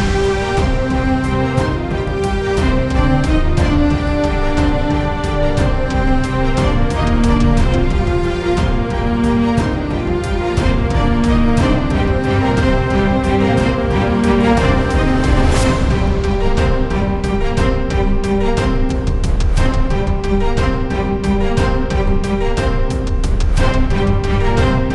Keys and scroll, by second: 4.8-7.2 typing, 12.9-16.0 typing.